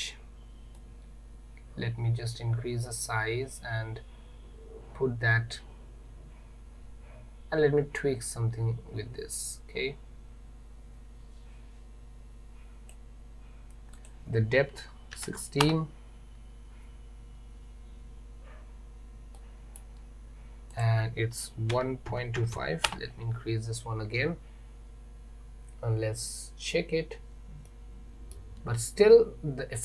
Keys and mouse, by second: 0.8-13.0 drag, 14.0-16.6 drag, 19.4-19.9 middle drag, 20.8-23.7 drag, 27.7-28.4 middle drag.